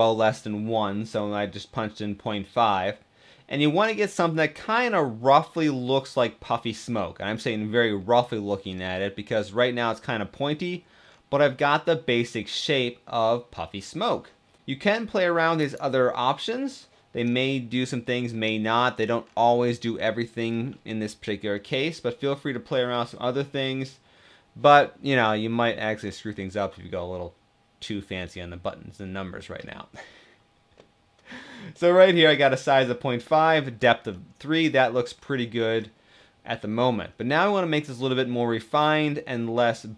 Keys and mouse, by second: 2.6-4.1 middle drag, 4.4-6.6 middle drag, 7.1-8.3 middle drag, 9.0-10.4 middle drag, 11.1 drag, 11.3-13.8 middle drag, 15.4-16.4 drag, 17.2 middle click, 18.4 middle drag, 19.3 middle click, 21.4-22.5 middle drag, 24.9-25.6 middle drag, 26.1-26.5 middle drag, 31.2 middle click, 31.4-31.9 middle drag, 33.8-34.5 middle drag, 35.0-35.4 middle drag, 36.4 middle click.